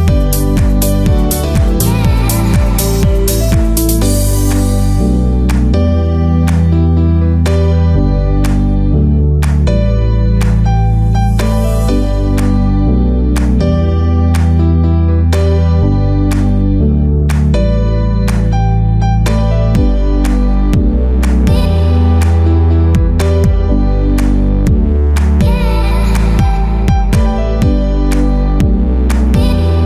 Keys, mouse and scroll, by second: 0.0-0.7 typing, 0.3 click, 0.8-1.2 scroll up 10, 1.0 shift+middle click, 1.2 shift+middle click, 1.5 shift+middle click, 1.6 middle click, 2.1 scroll down 9, 2.4 KP_7, 2.8 middle click, 3.0 scroll down 7, 3.2 shift+middle click, 3.4 middle click, 3.4 scroll up 1, 4.7 click, 4.8 scroll up 1, 5.8 click, 5.9 2, 5.9 3, 6.0 click, 6.2 c, 7.1 shift+middle click, 7.1 scroll down 7, 7.3 middle click, 7.4 scroll up 6, 7.5 shift+middle click, 7.7 shift+click, 7.8 shift+click, 8.6 click, 8.9 shift+middle click, 9.2 scroll up 6, 9.3 k, 10.5 middle click, 10.8 ctrl+z, 11.2 1, 13.9 click, 14.4 click, 16.5 click, 16.7 shift+d, 17.3 scroll up 1, 17.3 Escape, 17.5 click, 18.0 scroll up 1, 18.9 KP_3, 19.0 KP_9, 19.1 scroll down 11, 19.4 middle click, 19.6-20.0 scroll up 9, 20.1 click, 20.4 right click, 20.5 click, 20.6 shift+click, 20.7 f, 20.8 click, 20.9 scroll down 1, 21.1 click, 21.1 scroll up 2, 21.3 right click, 21.6 click, 21.8 f, 21.9 click, 22.2 click, 22.4 click, 22.4 3, 22.5 click, 22.8 2, 22.9 1, 23.1 click, 23.5 click, 23.8 shift+click, 23.9 shift+click, 24.0 right click, 24.1 click, 24.5 shift+click, 24.6 right click, 25.5 click, 25.6 e, 25.8 click, 26.3 shift+middle click, 26.3 scroll down 4, 26.4 click, 26.5 shift+middle click, 26.7 click, 26.8 click, 26.9 click, 27.1 a, 27.2 right click, 27.4 click, 28.2 click, 28.5 click, 28.6 shift+click, 28.9 right click, 29.0 click.